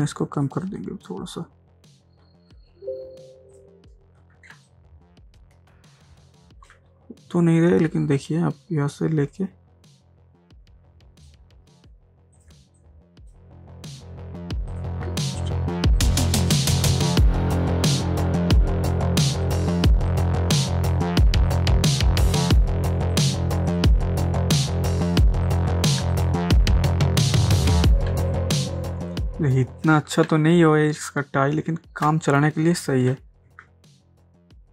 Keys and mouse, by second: 0.0-2.5 drag, 3.6 click, 4.5 ctrl+space, 4.7 ctrl+click, 5.1 ctrl+space, 8.2 alt+click, 9.6-11.5 drag, 13.1 click, 14.7 click, 16.0-19.4 alt+right drag, 19.4 alt+click, 20.1-22.0 drag, 22.0 click, 23.2 alt+click, 23.7 click, 25.8 click, 26.0 ctrl+space, 26.1 ctrl+click, 26.5 ctrl+space, 28.1 ctrl+space, 28.3 ctrl+click, 28.7 ctrl+space, 29.9 ctrl+space, 30.3 ctrl+click, 30.8 ctrl+space, 34.0 space.